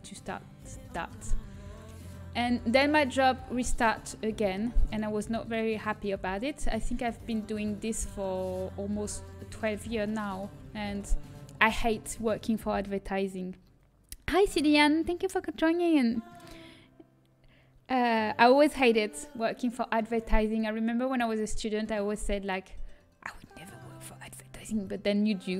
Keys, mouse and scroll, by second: 1.3 z, 1.9-3.0 right drag, 3.0 click, 5.2 middle click, 5.4-8.5 drag, 5.8-7.7 right drag, 9.0 z, 9.2-10.2 middle drag, 11.5-14.5 drag, 15.0-22.2 middle drag, 22.2-25.5 drag.